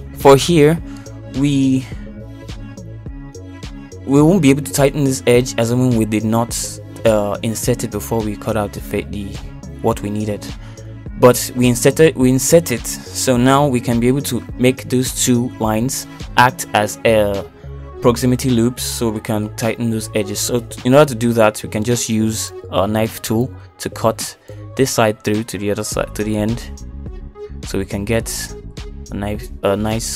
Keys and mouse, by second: 1.4 shift+middle click, 3.0 middle click, 4.9 shift+middle click, 5.6 middle click, 6.3 middle click, 7.9 middle click, 25.2 k.